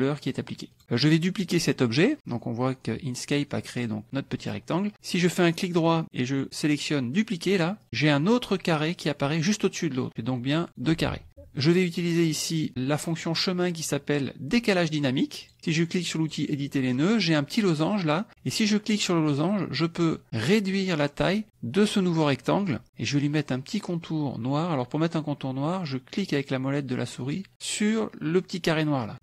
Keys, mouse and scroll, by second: 0.7 click, 4.0 click, 4.5 click, 5.6 right click, 10.1 click, 11.0 ctrl+z, 13.2 click, 16.2 click, 18.8-21.4 drag.